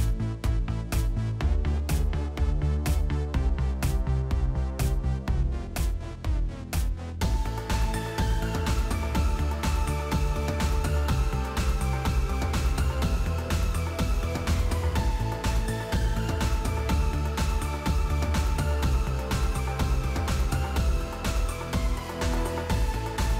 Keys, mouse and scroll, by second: 2.8 click, 3.6 click, 4.0 click, 4.3 click, 4.6 click, 4.9 click, 5.2 click, 5.5 click, 5.8 click, 6.0 click, 6.7 click, 7.4 ctrl+z, 7.8 click, 9.1 click, 10.2 click, 11.3 click, 12.0 click, 12.9 click, 13.2-14.3 typing, 14.6 click, 16.7 click, 17.3-18.9 typing, 20.0 click, 20.1 click, 20.8 click, 21.0 click, 22.4 click.